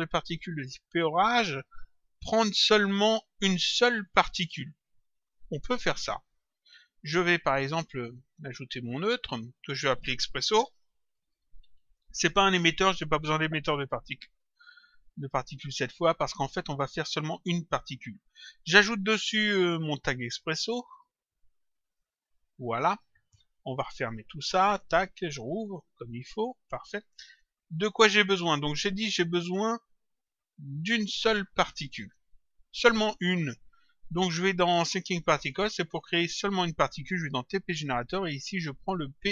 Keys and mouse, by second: 6.5 click, 9.3 click, 10.3-12.5 typing, 18.4 right click, 21.8 click, 24.5 ctrl+click, 26.6 click, 27.7 click, 35.3 click, 37.3 click, 39.1 click.